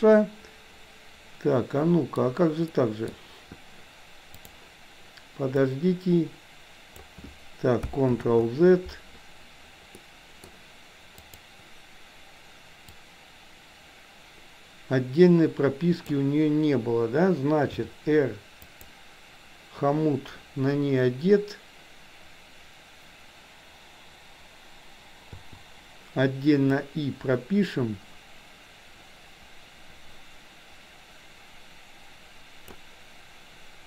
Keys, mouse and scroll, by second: 1.3-2.2 middle drag, 2.7 middle click, 4.4 click, 5.7-7.2 drag, 8.2 ctrl+z, 10.1 middle click, 11.2 click, 13.1-16.2 drag, 17.7 r, 25.4 i, 26.9-32.8 drag.